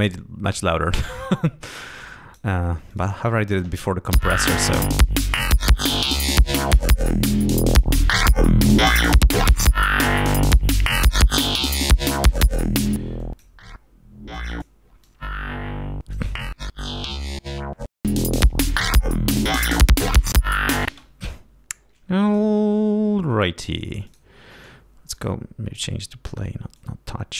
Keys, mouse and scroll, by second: 2.0 click, 2.9 click, 4.1 l, 6.5-9.6 drag, 10.4 click, 11.2-12.6 drag, 12.9 click, 13.2 click, 14.4 click, 15.1 click, 19.0 scroll up 2, 19.7 scroll down 2, 20.9 space, 22.2 click, 24.1 click, 26.8 click.